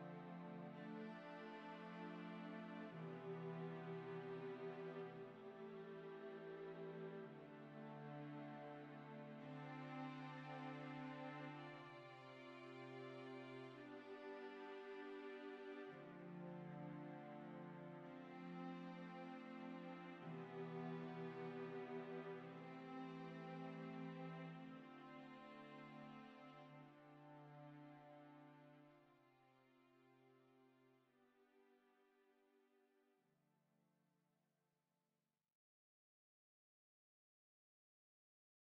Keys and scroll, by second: 4.7 typing, 4.9 Return, 6.9-7.6 typing, 15.0 ctrl+d, 21.0 0, 21.2 Return, 25.3 typing, 26.1-27.3 Down, 27.5 Down, 27.7 Down, 34.5 Tab, 36.1 w, 36.8 w.